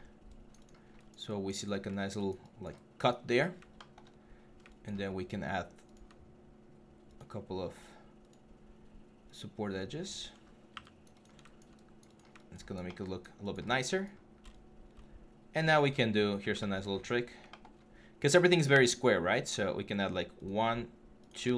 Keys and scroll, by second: 3.8 1, 10.2 3.